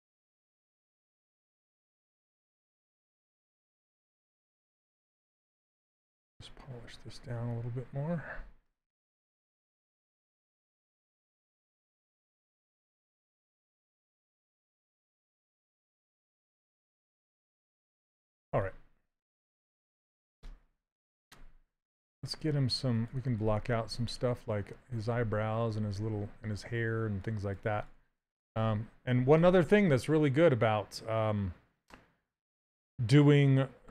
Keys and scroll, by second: 2.3 s, 21.2 space.